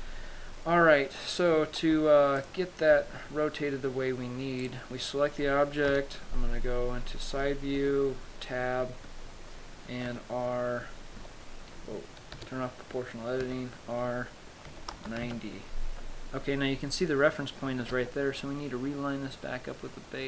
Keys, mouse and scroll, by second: 2.8 shift+click, 3.9-4.3 scroll down 1, 5.0 right click, 6.2 KP_3, 8.3 Tab, 10.6 r, 12.7 o, 13.9 r, 16.9-18.3 scroll up 2, 18.3 g.